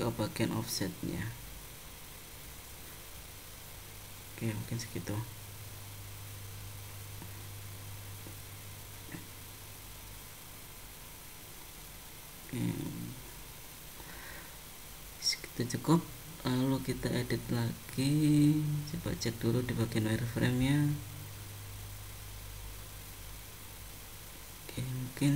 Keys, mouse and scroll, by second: 1.2 0, 4.7 middle click, 7.5 click, 12.7 middle click, 14.5 click, 15.6 click, 17.0 click, 17.9 middle click, 21.1 scroll down 1, 21.9 click, 22.2 middle click.